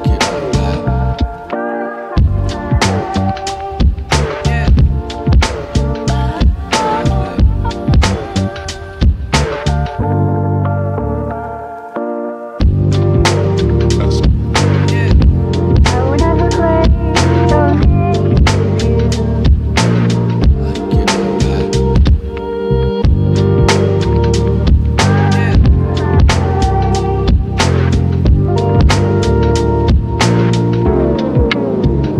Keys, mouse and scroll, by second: 6.1-9.6 drag, 10.1 ctrl+a, 17.7 click, 21.8 click.